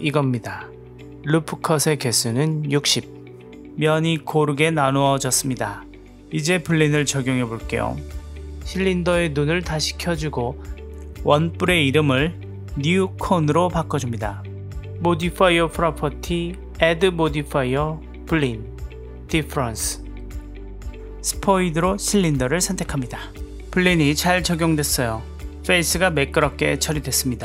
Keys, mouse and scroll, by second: 0.3 click, 2.3-4.0 drag, 8.4 click, 9.6-11.1 middle drag, 12.2 click, 12.4-14.0 drag, 15.8-17.9 drag, 19.4 click, 21.8 click, 24.0 click, 25.0-27.4 middle drag.